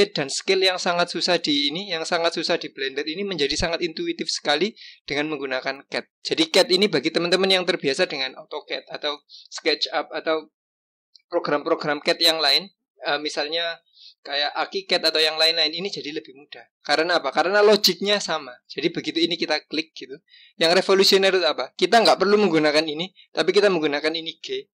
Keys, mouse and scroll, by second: 5.8-8.9 drag, 18.6 click, 19.8 click.